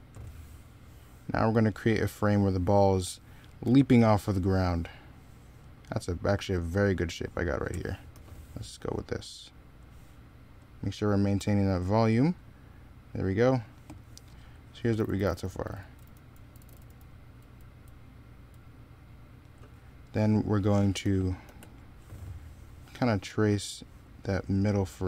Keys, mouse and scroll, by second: 3.5 ctrl+z, 14.8 z, 15.5 x, 16.4 z, 17.2 x, 20.8 e, 21.3 b.